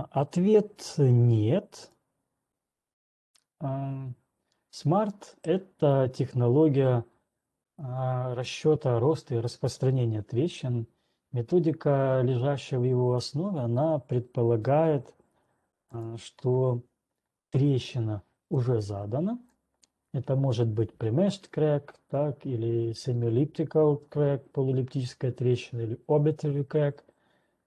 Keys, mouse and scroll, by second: 2.6 click, 3.5 scroll up 6, 5.5 middle click, 6.4 right click, 7.0 middle click, 7.5 scroll, 12.9-13.4 scroll, 14.0-16.2 scroll, 16.2 ctrl+1, 16.4 click, 19.9 click, 21.4 click.